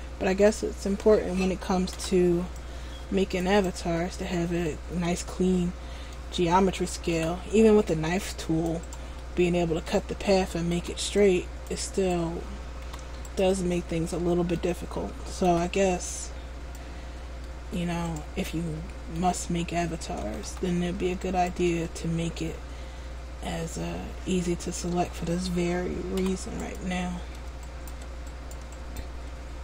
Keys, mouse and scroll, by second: 0.1-0.5 scroll down 2, 0.5 middle click, 2.1 c, 4.1 middle click, 7.3 c, 9.1 right click, 9.4 middle click, 10.9 c, 14.3 middle click, 15.6 c, 18.6 middle click, 19.7 scroll down 1, 20.6-21.3 scroll down 1, 20.6 a, 21.4 alt+right click, 22.0 middle click, 24.0 middle click, 26.4 p, 27.8 alt+right click, 28.4 right click, 29.0 alt+right click.